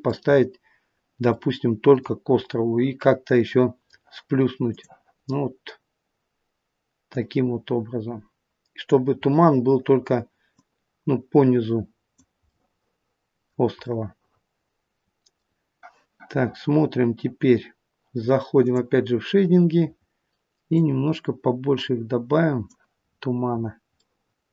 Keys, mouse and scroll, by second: 0.3 scroll up 5, 1.5 middle click, 1.5 scroll up 2, 4.7 click, 7.0 click, 9.2-9.6 scroll up 4, 10.4 click, 12.6 middle click.